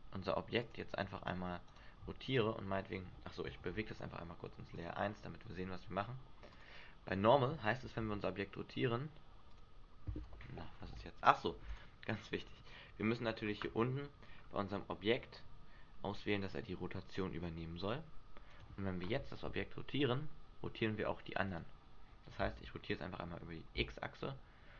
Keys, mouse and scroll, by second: 0.5 click, 1.6 right click, 2.6 right click, 3.7 m, 6.5 click, 8.0 r, 9.6 click, 10.7 ctrl+z, 11.7 right click, 12.9-13.4 scroll down 4, 14.4 scroll down 1, 15.9 scroll down 1, 17.1 click, 18.5 right click, 19.4 r, 21.5 right click, 22.4 r.